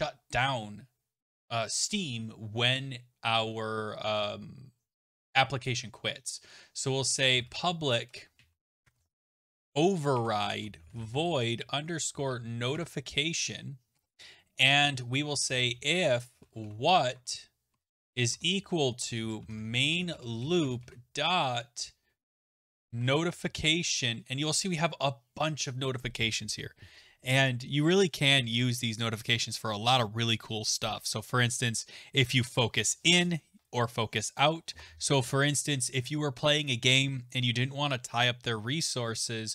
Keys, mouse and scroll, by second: 6.7-12.6 typing, 10.1 Tab, 12.7 Tab, 13.9 Return, 13.9 typing, 15.1-21.3 typing, 17.1 Tab, 22.5-23.8 typing, 29.1-34.4 scroll.